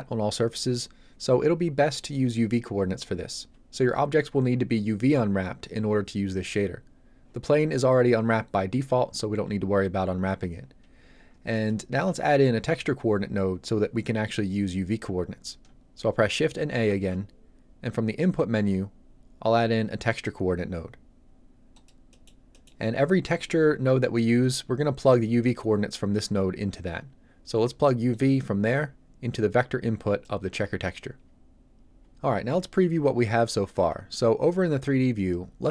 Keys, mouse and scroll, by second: 11.6 middle click, 16.9 shift+a, 20.1 click, 22.1 middle click, 28.1 click.